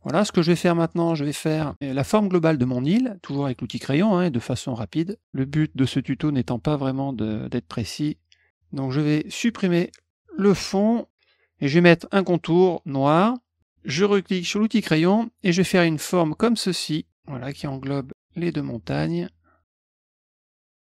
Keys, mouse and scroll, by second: 0.6 middle click, 3.3 click, 4.5-8.1 drag, 8.2 middle click, 10.3 click, 13.1 middle click, 14.4 click, 14.9 middle click, 16.5-20.9 drag.